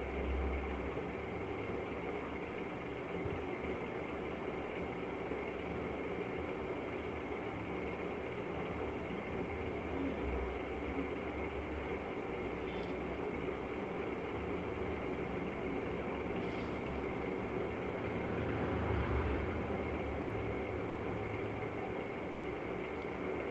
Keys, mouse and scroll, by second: 0.4 click, 2.0 click, 5.5 right click, 6.6 click, 7.4 click, 8.2 click, 9.0 click, 9.8 click, 12.3 click, 16.1 click, 18.2 click, 19.7 right click, 20.5 click, 21.7 right click, 21.7 click, 22.5 click.